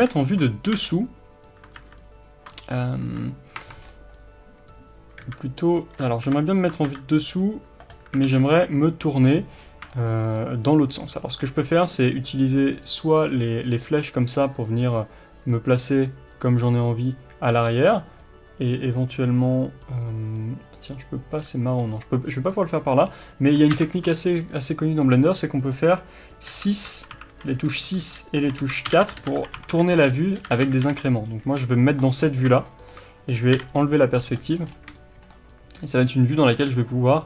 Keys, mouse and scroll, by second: 0.0 ctrl+KP_7, 0.7 KP_7, 1.7 ctrl+KP_7, 3.0 KP_7, 3.6 Tab, 3.8-5.2 scroll down 1, 5.2 KP_3, 6.8 ctrl+KP_7, 8.2 alt+a, 9.6-9.9 scroll up 1, 10.9-12.4 scroll down 1, 12.4 click, 22.3 scroll down 1, 22.5-26.5 middle drag, 23.7 ctrl+KP_7, 26.5 KP_6, 29.4 KP_6, 30.7 KP_6, 32.2 scroll up 1, 32.7 shift+middle click, 33.5 KP_5, 34.2-34.6 scroll down 1, 35.3-37.2 shift+middle drag, 36.5 scroll down 1.